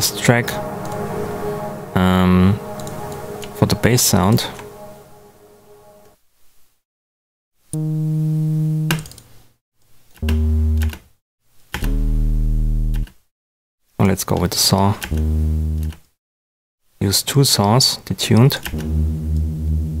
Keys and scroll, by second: 7.6 space, 8.8 space, 10.1 space, 12.9 space, 15.0 space, 18.6 space.